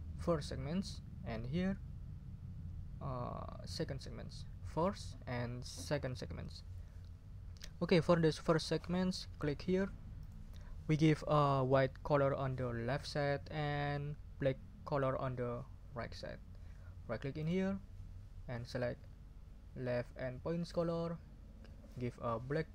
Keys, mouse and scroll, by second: 0.2 click, 3.6 click, 4.8 click, 5.8 click, 10.2 click, 17.4 right click, 20.7 click, 21.9-22.7 drag.